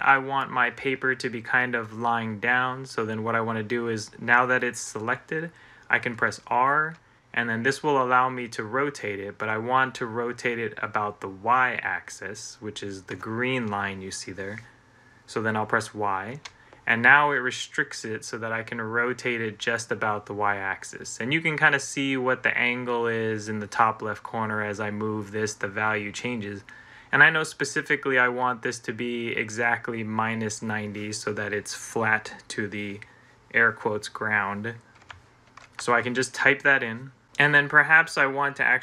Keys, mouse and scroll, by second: 6.8 middle click, 7.3-13.5 drag, 16.2 y, 35.2-37.7 typing.